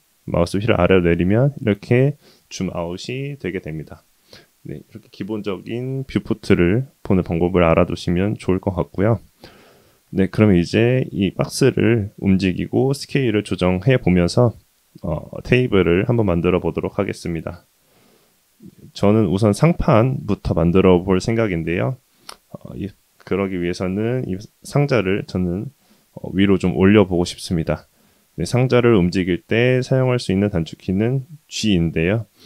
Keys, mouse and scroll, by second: 0.4-3.3 scroll down 4, 8.3-8.8 middle drag, 9.0-9.7 scroll up 3, 9.7 shift+middle drag, 10.5-11.5 middle drag, 11.7-12.7 middle drag, 13.5 shift+middle drag, 15.0-16.0 middle drag, 16.7-18.4 middle drag, 21.5-22.2 middle drag, 27.7-28.2 middle drag, 28.6 scroll down 1, 28.8-30.8 middle drag, 31.5 g.